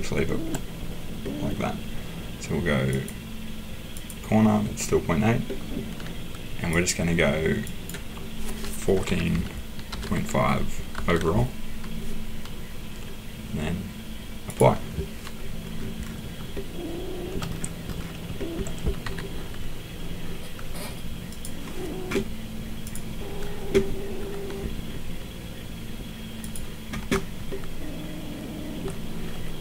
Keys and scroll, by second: 8.9-11.4 typing, 19.0 Escape.